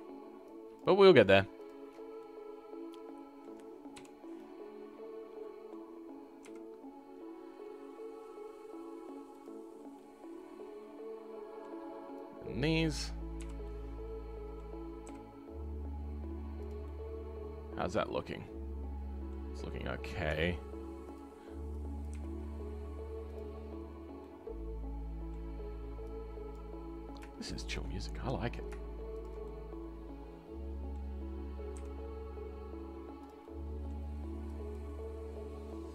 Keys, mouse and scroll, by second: 2.2-3.9 middle drag, 3.9 KP_5, 4.3-6.4 middle drag, 6.4 r, 9.6-9.9 scroll down 2, 9.9-12.8 middle drag, 12.8 click, 13.3 KP_5, 13.6-15.0 middle drag, 15.0 g, 16.8-20.3 middle drag, 24.2-25.5 middle drag, 25.5-26.5 scroll up 4, 26.5 click, 26.7-27.7 scroll down 2, 28.0-29.2 middle drag, 29.4-31.8 middle drag, 31.8 r, 33.4-34.7 middle drag, 34.7 click, 35.6 middle click.